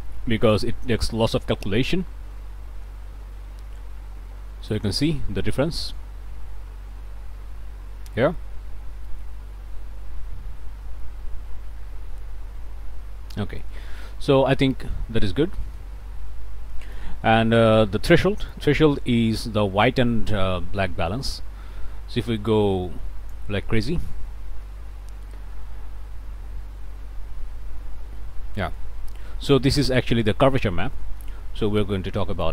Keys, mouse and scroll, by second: 4.7-6.2 shift+drag, 11.3 scroll up 2, 12.6-13.1 scroll up 2, 13.3-13.8 scroll up 4, 14.0 click, 15.1 scroll up 2, 15.6 click, 16.8 click, 17.1 middle click, 17.1-18.0 scroll up 1, 18.0-18.5 shift+scroll up 1, 18.5-23.5 shift+drag, 23.5-28.8 shift+scroll up 1, 28.8 scroll up 1, 29.8 click, 30.9 click, 32.4-32.5 shift+drag.